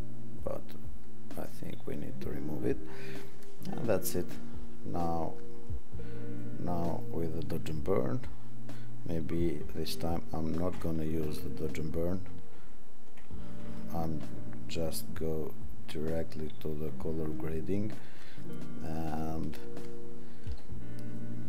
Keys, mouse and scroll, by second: 10.7 ctrl+-, 11.2 ctrl+-, 11.6 ctrl+-, 12.6 ctrl+=, 20.0 click.